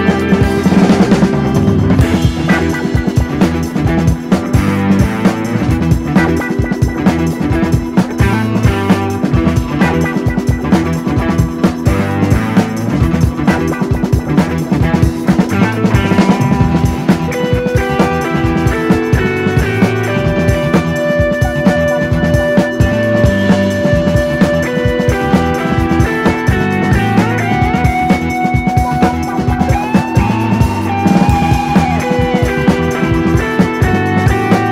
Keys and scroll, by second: 0.0-1.1 typing, 2.3-5.0 typing, 5.3 super+d, 7.3 super+d, 7.4 super+d, 7.6 super+d, 10.2 BackSpace, 15.6 super+d, 19.2 Right, 19.9 Left, 20.2 Down, 20.5 Down, 27.3 super+d, 32.2 super+d, 32.5 super+d, 32.8 super+d.